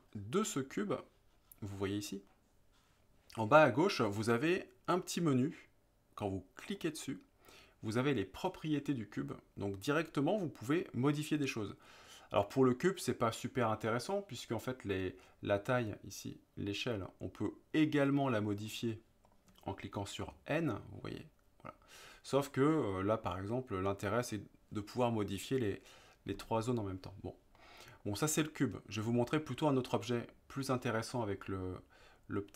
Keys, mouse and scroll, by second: 6.7 click, 15.9-18.7 drag, 19.3 click, 20.3 n, 27.6-28.0 middle drag.